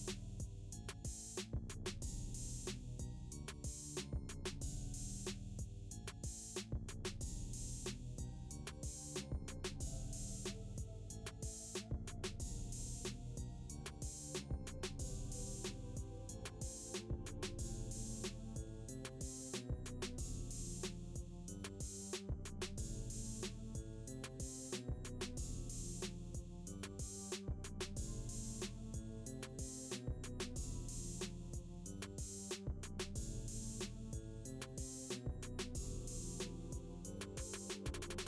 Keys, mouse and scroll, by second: 5.4-7.0 drag, 8.9-14.2 drag, 21.6 n, 23.9-25.8 drag, 26.9 space, 28.8 space, 30.3-31.5 drag, 32.3 space, 35.1 space, 37.9 scroll down 1.